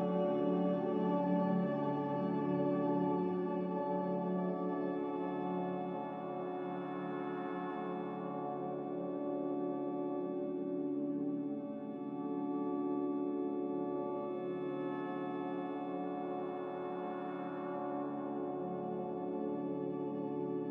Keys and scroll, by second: 12.5 typing, 16.8 typing, 19.1 n.